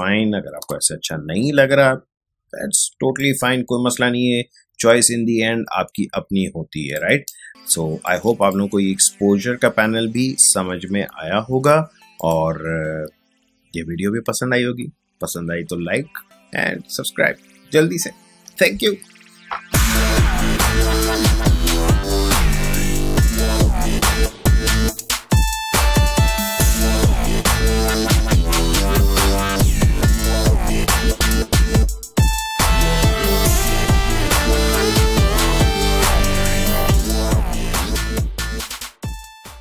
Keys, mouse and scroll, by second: 3.2 click, 3.4 space, 7.2 ctrl+click.